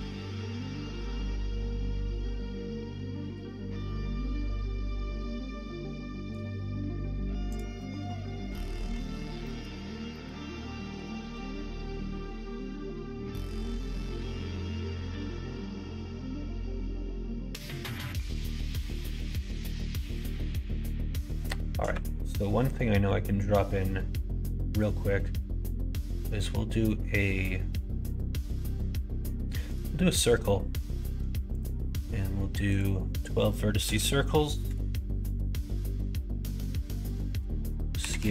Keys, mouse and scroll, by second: 9.4 middle click, 10.0 middle click, 10.9 KP_1, 11.2 KP_3, 18.1-19.3 middle drag, 20.7 middle click, 21.8 shift+a, 32.6-34.9 drag, 36.8-38.3 drag.